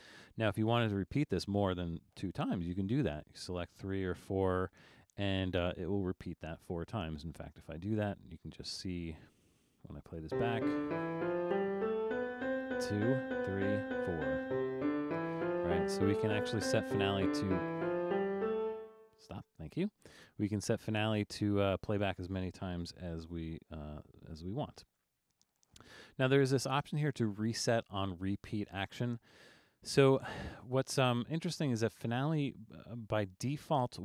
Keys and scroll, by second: 2.6 3, 3.9 BackSpace, 4.2 4, 24.9 2.